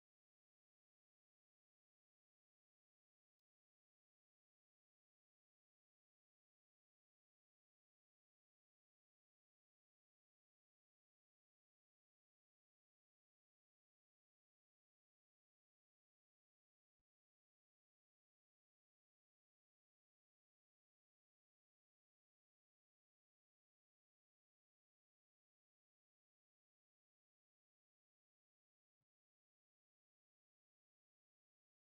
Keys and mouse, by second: 0.3 click, 0.5 space, 3.2 space, 3.9-7.7 drag, 8.5 click, 8.7 g, 10.1 click, 10.2 space, 11.1-16.1 drag, 11.1 space, 16.8 g, 19.1 click, 19.2 space, 20.5 space, 21.6 click, 22.6-23.8 right drag, 24.4 space, 25.2 space, 25.8 click, 26.0-28.0 right drag, 28.7 click, 28.8 space, 31.5 space, 31.7 click.